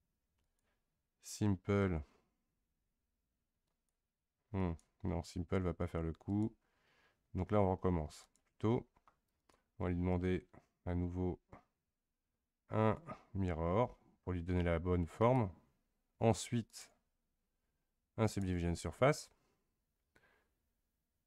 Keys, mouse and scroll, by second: 0.4 click, 3.7 click, 4.6 click, 6.3 click, 8.2-15.3 drag, 18.4-19.8 drag.